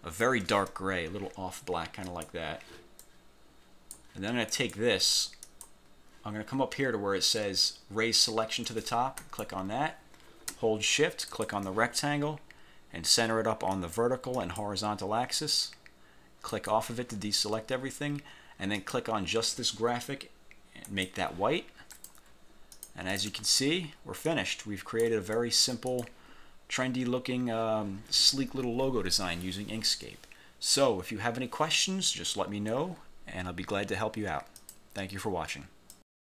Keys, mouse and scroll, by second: 2.2 click, 3.1 click, 4.6 click, 5.6 click, 9.3 click, 11.4 shift+click, 13.9 click, 14.5 click, 16.6 click, 18.9 click, 21.0 click, 22.1 click, 22.9 click, 24.4 ctrl+shift+click, 25.5 ctrl+shift+click, 34.7 click, 36.0 click.